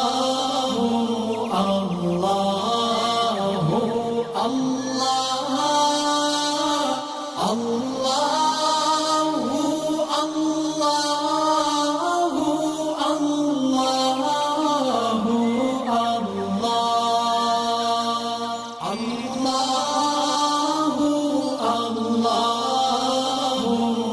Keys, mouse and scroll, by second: 0.1-3.4 alt+drag, 3.4 ctrl+shift+z, 3.8 click, 5.8-7.4 alt+shift+click, 7.5 alt+shift+scroll up 3, 8.5-10.0 drag, 11.3-12.6 alt+drag, 12.8-13.2 alt+scroll down 2, 13.2 click, 13.8 alt+scroll down 1, 14.2 alt+scroll up 1, 14.7 scroll up 2, 15.1 click, 16.0-17.1 alt+click, 17.2 alt+scroll down 1, 17.8 click, 18.0 space, 18.1 click, 18.5 alt+scroll up 1, 19.3 alt+shift+click, 21.1 alt+shift+scroll up 1, 21.7-22.8 drag.